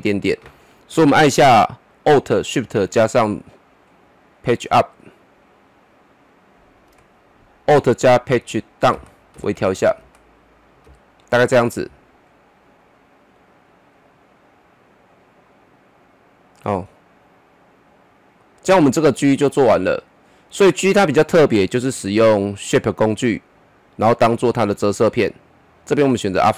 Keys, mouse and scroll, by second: 2.1 alt+Num_Lock, 2.1 shift+click, 4.8 alt+shift+Page_Up, 7.7 alt+shift+Page_Up, 8.9 alt+Page_Down, 12.6-22.0 drag, 25.7-26.5 drag.